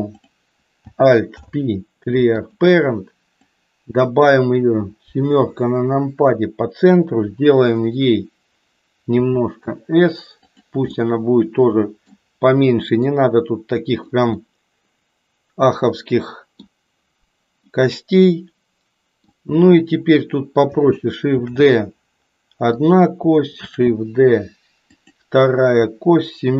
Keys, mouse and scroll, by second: 0.1 click, 1.2 alt+p, 3.3-4.6 drag, 5.2 KP_7, 9.1 s, 10.9-12.2 middle drag, 13.2 click, 14.3-16.8 middle drag, 17.7-19.3 middle drag, 21.3 shift+d, 26.3 KP_7.